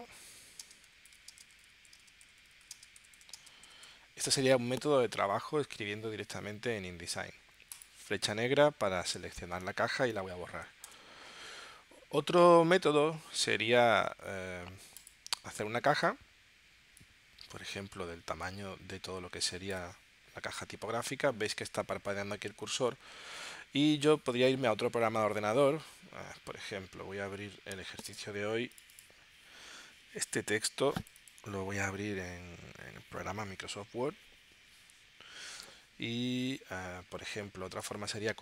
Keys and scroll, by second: 3.3 space, 3.8 y, 10.9 BackSpace.